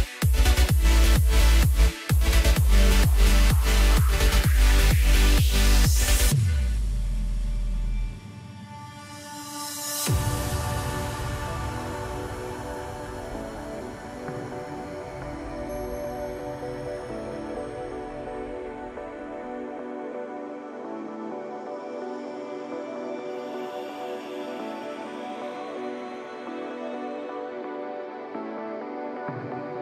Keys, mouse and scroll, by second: 0.0 click, 0.2 click, 1.1-3.2 drag, 3.2 scroll down 4, 3.5 middle click, 4.5 click, 5.3 3, 5.5 click, 6.0-7.0 middle drag, 8.3 scroll down 2, 9.2-9.9 scroll up 1, 9.9 KP_1, 10.5-10.9 scroll down 1, 10.9 e, 11.9-12.6 scroll down 4, 12.6 g, 13.7 middle click, 14.1-14.8 scroll up 1, 14.8 x, 15.8-16.5 scroll up 1, 16.5 2, 17.3 click, 17.4 click, 18.5 click, 19.1-21.0 drag, 21.0 scroll down 2, 21.3 middle click, 21.9 Tab, 22.2 scroll down 3, 22.8 KP_1, 24.3 KP_Divide, 25.2 scroll up 1, 26.4 r, 28.7 scroll down 1, 29.2 g.